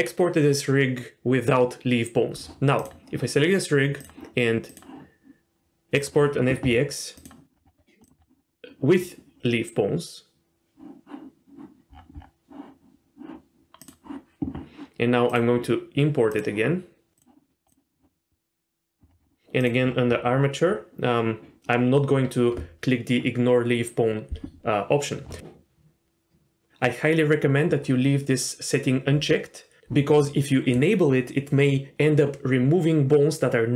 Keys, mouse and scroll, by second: 2.8 click, 4.0-6.1 drag, 15.3-17.2 drag.